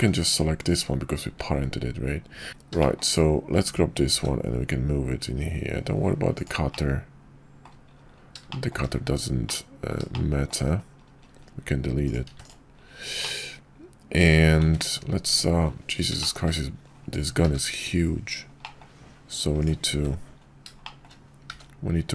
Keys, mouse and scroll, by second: 1.2 `, 2.8 shift+middle click, 4.1 g, 6.8-7.7 middle drag, 8.5 shift+drag, 9.6-10.0 drag, 10.1 shift+click, 12.3 x, 13.2-14.6 drag, 14.6 `, 15.2 `, 16.2 shift+drag, 17.4 g, 18.6 drag, 19.9 `, 20.8 shift+click, 21.5 g.